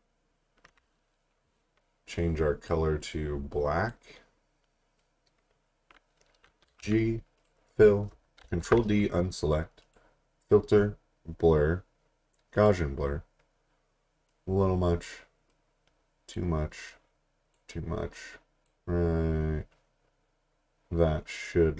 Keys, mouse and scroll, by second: 6.7 g, 7.4 click, 8.4 ctrl+d, 9.8 click, 12.5 click.